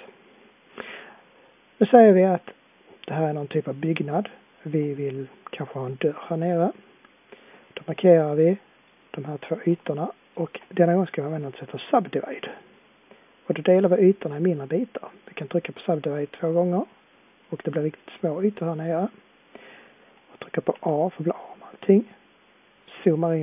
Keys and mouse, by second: 3.7-12.6 middle drag, 20.7 a, 22.8-23.4 middle drag.